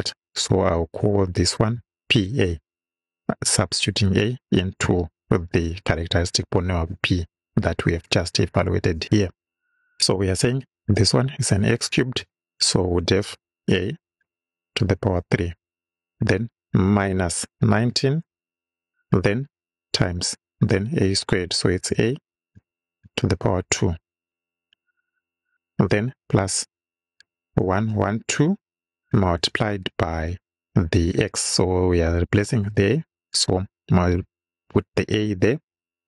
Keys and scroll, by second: 0.9 shift+p, 1.8 shift+a, 5.5 =, 13.6 shift+a, 14.6 shift+6, 15.3 shift+3, 16.9 -, 17.8 1, 18.3 9, 18.9 BackSpace, 19.9 shift+8, 21.8 shift+a, 22.9 shift+6, 23.4 shift+2, 24.0 2, 25.5 BackSpace, 26.8 shift+=, 27.6 shift+1, 28.6 2, 29.0 BackSpace, 29.4 shift+8, 33.2 shift+a.